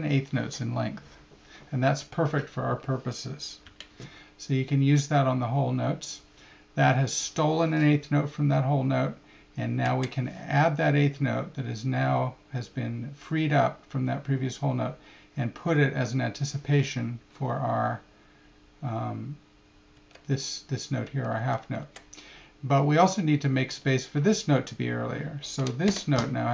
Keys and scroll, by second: 9.8 Right, 19.9 Right, 21.4 Left, 21.8 Right, 25.9 Left.